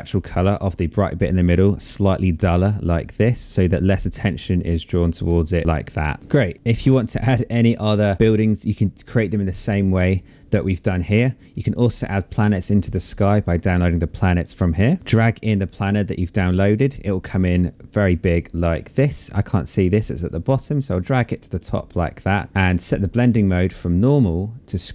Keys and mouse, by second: 2.7 click, 4.5 click, 5.7 click, 6.7 click, 7.0 click, 7.4 shift+click, 7.6 ctrl+z, 8.1 click, 12.4 click, 13.8 right click, 15.0 click, 19.6 click, 22.7 click, 24.4 click.